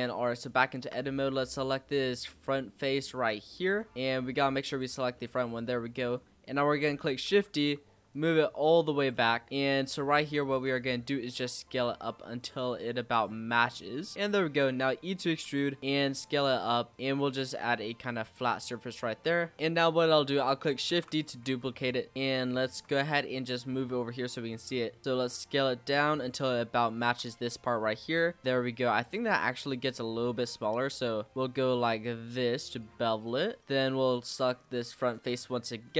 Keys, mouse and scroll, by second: 0.5 shift+middle click, 1.4-2.0 scroll down 5, 2.0-3.5 middle drag, 3.5 click, 3.9 middle click, 4.6 click, 5.1 middle click, 6.0 click, 7.2 shift+d, 8.1 click, 9.2-10.0 shift+scroll up 10, 9.5 shift+middle click, 10.0 shift+middle click, 10.8 s, 13.6 s, 14.1 e, 15.2 s, 16.9 click, 17.1 e, 18.6 shift+scroll down 1, 18.8 shift+middle click, 19.2-19.5 shift+scroll down 5, 20.9 shift+d, 21.4 s, 22.1-22.5 scroll up 3, 22.5 shift+middle click, 23.0 g, 26.4 s, 27.0 e, 29.5 e, 31.3 ctrl+b, 34.6 click, 35.4 scroll up 2, 35.8 shift+middle click.